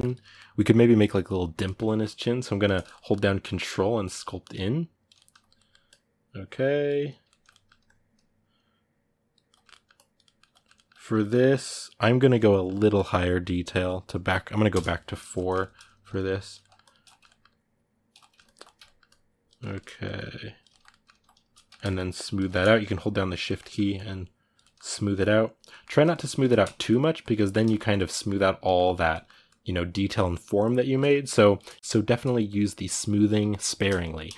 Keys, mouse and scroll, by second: 0.0-2.9 ctrl+middle drag, 2.9-4.9 ctrl+drag, 4.9 ctrl+middle click, 5.6-7.0 drag, 7.0 ctrl+middle click, 7.6-9.2 ctrl+drag, 9.2 ctrl+middle click, 9.7 ctrl+click, 10.0-11.1 ctrl+middle drag, 11.1-15.1 ctrl+drag, 15.1 ctrl+middle click, 16.0 ctrl+click, 16.4 middle click, 16.6 ctrl+click, 16.8 ctrl+middle click, 17.2 ctrl+click, 17.9 middle click, 18.2 ctrl+click, 18.4 ctrl+middle click, 18.8 ctrl+click, 19.3 ctrl+middle click, 19.9 click, 20.5-21.7 ctrl+middle drag, 21.7 shift+click, 22.2 ctrl+middle click, 22.6 shift+click, 23.2 ctrl+middle click, 23.7 click, 24.4 ctrl+middle click, 24.6 click, 25.4 middle click, 25.9 shift+click, 26.2 ctrl+middle click, 26.5 shift+click, 27.2 ctrl+middle click, 27.5 shift+click, 27.9-29.2 middle drag, 29.2-30.7 drag, 30.7 middle click, 31.1 click, 31.8 middle click, 32.2 click, 32.9 ctrl+middle click, 33.2 shift+click, 33.5-34.3 shift+middle drag.